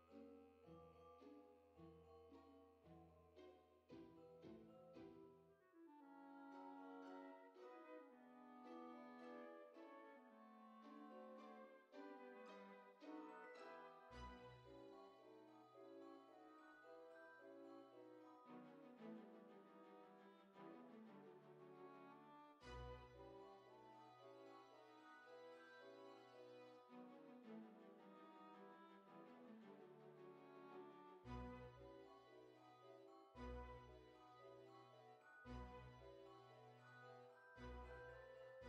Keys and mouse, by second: 0.2 shift+middle click, 1.3 F6, 1.9 click, 2.4 Tab, 3.2 click, 4.4 o, 9.1 click, 10.2 Tab, 11.1 click, 13.5 click, 14.3 middle click, 15.1 s, 16.8 click, 17.2 F6, 19.9 Tab, 21.2 KP_7, 24.2 F6, 25.7 click, 30.0 click, 31.2 click, 31.6 g, 35.5 click, 37.8 click, 38.3 r.